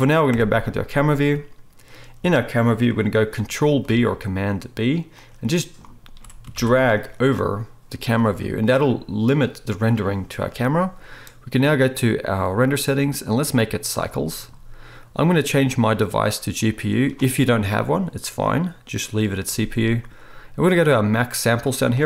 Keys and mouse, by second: 0.3 KP_0, 1.3-3.9 right drag, 3.9-6.2 ctrl+b, 5.1-8.0 ctrl+drag, 6.7 ctrl+b, 8.0-14.6 right drag, 11.8 click, 11.8 middle click, 13.2-14.6 drag, 13.2-22.0 middle drag.